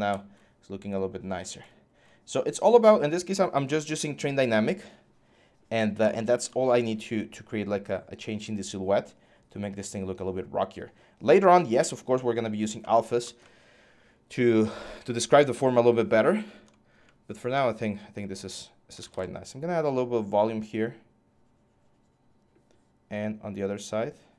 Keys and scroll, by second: 18.4-19.2 typing.